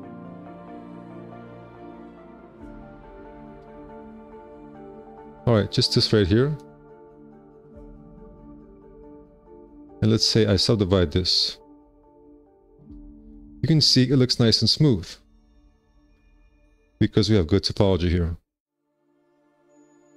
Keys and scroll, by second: 1.5 ctrl+z, 6.0 2, 6.2 q, 7.1 2, 8.3 shift+r, 8.5 c, 9.2 2, 12.0 3, 12.4 F4, 15.4 F4, 16.0 w.